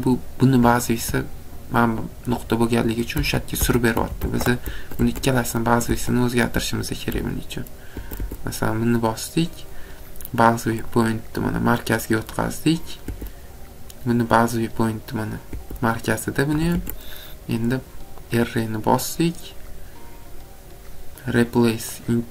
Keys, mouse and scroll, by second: 2.6 scroll, 3.2 ctrl+z, 3.6 ctrl+z, 3.9 ctrl+z, 4.2 ctrl+z, 4.8 Escape, 5.0 Escape, 5.8 ctrl+z, 7.1 Escape, 7.9 Escape, 8.2 Escape, 9.0 click, 10.9 click, 12.4 click, 13.1 Escape, 14.6 click, 15.3 scroll, 15.5 Escape, 16.0 scroll down 2, 16.5 Escape, 16.7 Escape, 17.2 scroll down 1, 18.3 click, 22.1 click.